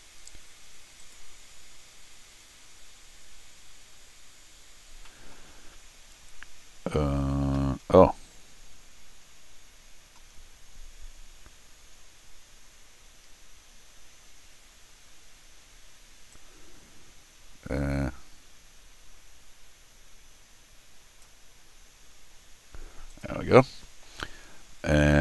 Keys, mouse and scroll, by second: 1.0 click, 1.7 scroll down 1, 1.8 scroll up 2, 4.6 scroll down 2, 5.0 middle click, 7.9-8.2 scroll down 2, 16.3-21.2 drag, 23.1 click, 24.1-24.6 scroll up 2.